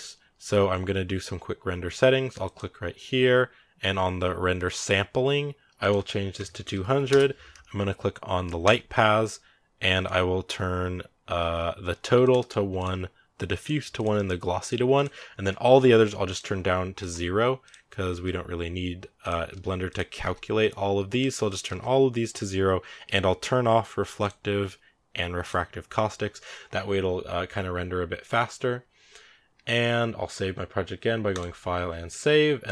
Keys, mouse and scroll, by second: 2.3-6.9 drag, 6.9 0, 12.6 click, 13.4 click, 14.4 click, 16.1-18.3 drag, 18.3-18.6 scroll down 5, 19.0-24.1 drag, 25.3 click.